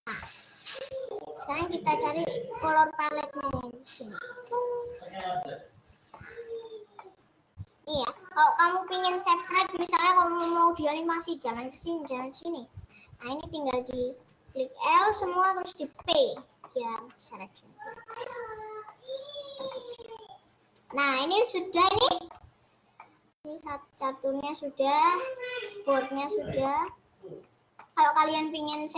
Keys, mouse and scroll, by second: 0.4-2.6 middle drag, 2.6 g, 5.4 middle click, 6.2 scroll up 2, 6.4 Tab, 6.8 scroll down 1, 7.0-8.2 middle drag, 8.2 scroll up 1, 9.0-12.4 middle drag, 12.4 scroll down 2, 13.2 Tab, 14.2 click, 15.4-17.2 middle drag, 17.2 Tab, 17.4-17.8 scroll up 2, 18.2-19.2 middle drag, 19.2-19.6 scroll up 2, 19.6 scroll down 1, 19.8-21.2 middle drag, 21.2 scroll down 1, 21.4-22.6 middle drag, 22.6-23.1 scroll down 2, 23.1-26.1 middle drag, 26.9 scroll up 2, 27.4 Tab, 27.9 middle click, 28.2 scroll down 2, 28.8-28.9 middle drag.